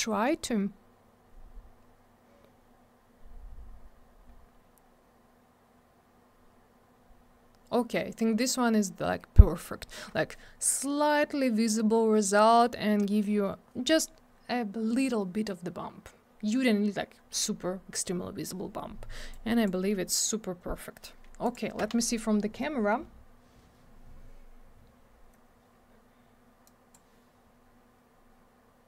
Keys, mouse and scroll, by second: 1.7-2.5 scroll down 1, 2.5 scroll up 1, 4.3 scroll down 1, 6.9-8.0 scroll up 1, 8.0 scroll down 1, 8.9-9.4 scroll up 1, 9.7 scroll down 1, 19.3 click, 21.4 click, 21.6 click, 26.7 click.